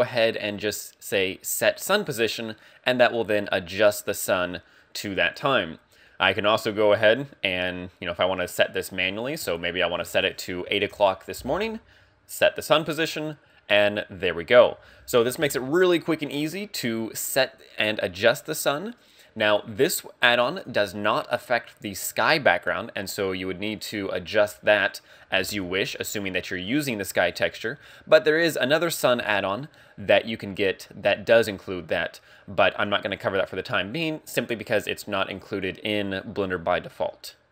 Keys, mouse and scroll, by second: 1.3 click, 9.4 ctrl+click, 12.4 click, 15.1 KP_1, 20.1 click, 20.4 click, 20.8 scroll down 3, 27.6-28.7 scroll up 2, 28.7-29.2 scroll up 4, 29.2 shift+middle click.